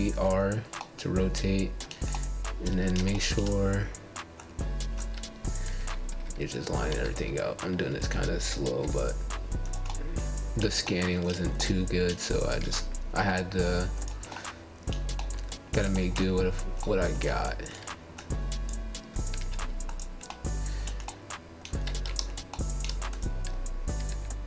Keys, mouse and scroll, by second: 0.5-1.3 scroll down 4, 1.3-2.8 middle drag, 2.8-3.4 scroll down 3, 3.4-4.2 scroll up 6, 4.2 shift+middle click, 4.6 shift+scroll down 1, 4.9 shift+middle click, 5.8-6.9 scroll down 3, 8.7 Tab, 9.0 click, 10.4 z, 11.2 z, 12.6 z, 13.7 click, 15.7 click, 16.8 click, 17.3 click, 19.1 Tab, 20.0 click, 22.1 x, 22.2 click.